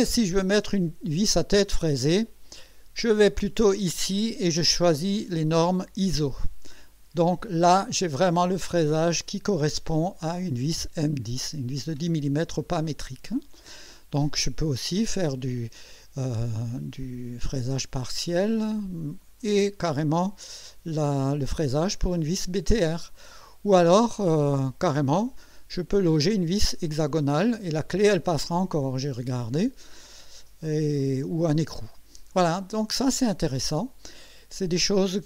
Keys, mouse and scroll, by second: 3.5 click, 6.2 click, 14.5 scroll down 1, 17.6 scroll down 1, 18.8 scroll down 1, 20.3 scroll down 1, 20.8 scroll up 1, 21.7-23.2 drag, 24.4 scroll down 2, 31.0-31.7 drag, 32.2 scroll down 2, 33.6 click.